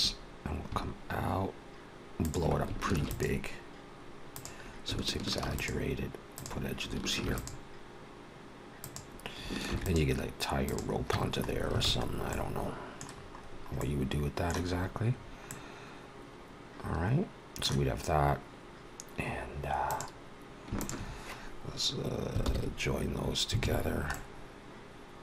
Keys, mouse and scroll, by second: 2.9 ctrl+r, 5.4 ctrl+r, 7.1 ctrl+r, 9.5 ctrl+r, 11.0 Tab, 11.3-12.2 scroll down 6, 11.7 alt+a, 12.2 middle click, 13.0-13.6 scroll down 5, 13.6 middle click, 14.6-15.2 scroll up 5, 15.4 middle click, 17.7-18.3 scroll up 2, 19.0 scroll up 2, 19.7 click, 20.6 shift+click, 22.2 ctrl+j, 23.5 alt+a, 23.6 scroll down 3, 24.0 middle click.